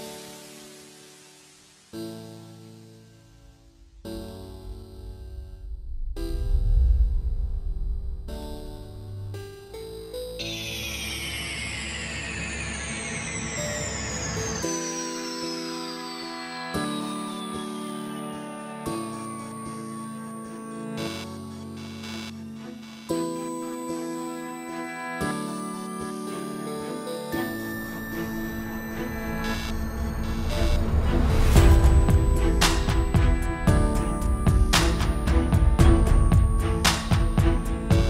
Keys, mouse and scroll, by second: 0.9 ctrl+space, 3.4 click, 3.4 scroll down 1, 3.6 scroll up 2, 4.0 scroll down 1, 4.2 z, 4.8-6.7 click, 6.7-7.2 scroll down 6, 7.2 click, 7.6-8.5 scroll down 2, 7.8 click, 8.9 z, 10.1 click, 12.3 scroll up 1, 12.4 scroll down 1, 14.2 click, 15.5 click, 19.3 click, 20.2 alt+a, 22.2 click, 22.5 g, 26.2 click, 32.7 KP_7, 32.9-33.6 scroll down 2, 33.1 r, 35.5 scroll down 1, 35.6 scroll up 2, 35.8 r, 36.7 r.